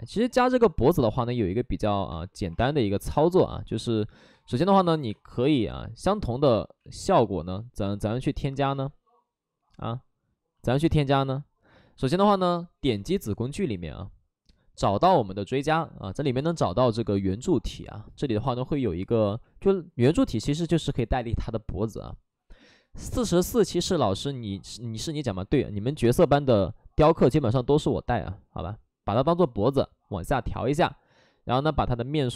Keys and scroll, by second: 2.1 space, 2.4 2, 2.5 space, 3.8 1, 4.3 3, 5.0 space, 6.7 ctrl+z, 10.0 ctrl+z, 12.0 space, 25.8 w.